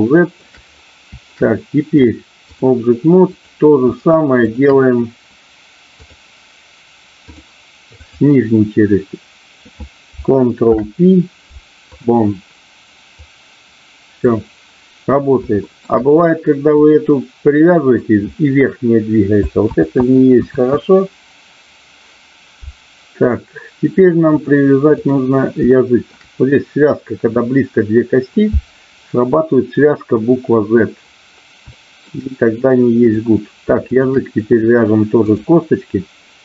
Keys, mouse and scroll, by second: 1.9 click, 3.3 click, 4.4 shift+click, 6.2-7.3 drag, 7.9-9.0 drag, 10.7 ctrl+p, 13.2-14.2 drag, 15.5 shift+middle click, 16.7-17.9 drag, 20.9 ctrl+z, 22.5 ctrl+z, 24.3 click, 25.7 shift+middle click, 31.8 shift+middle click, 33.0 click, 35.3 click.